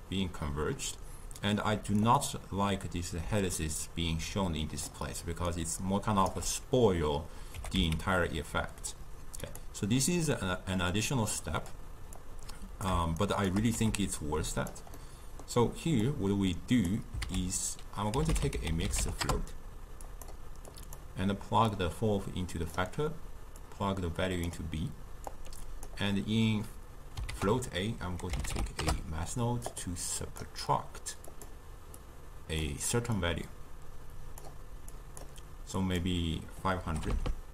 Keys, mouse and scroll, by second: 3.3 d, 3.5-4.9 drag, 4.9-5.5 d, 5.5 right click, 6.3 d, 6.5 d, 7.5 g, 10.3-11.4 middle drag, 11.4 click, 12.2 click, 13.2 shift+right click, 13.8 g, 15.0-16.0 middle drag, 16.0 click, 17.3 ctrl+a, 20.7-21.8 drag, 23.6 drag, 25.3-27.3 drag, 27.3 ctrl+a, 30.3-37.2 drag, 37.2 0.